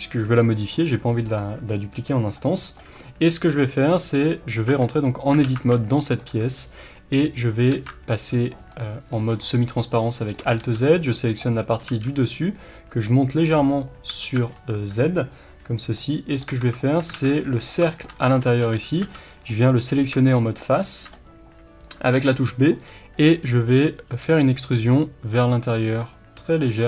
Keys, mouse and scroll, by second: 0.8 scroll up 1, 3.8-4.6 middle drag, 4.6 Tab, 5.0-5.4 scroll up 1, 5.4 alt+a, 5.7 shift+middle click, 7.7 alt+z, 8.7 middle click, 10.6-13.6 middle drag, 10.6 b, 13.6 click, 14.2 alt+z, 14.5 scroll down 1, 14.7 Tab, 15.3-15.9 scroll up 1, 15.9-25.6 middle drag, 16.4 Tab, 17.1 alt+a, 18.6 3, 19.0 b, 19.7-20.1 scroll up 1, 24.1 e, 25.6 click, 25.8 s, 26.7 click.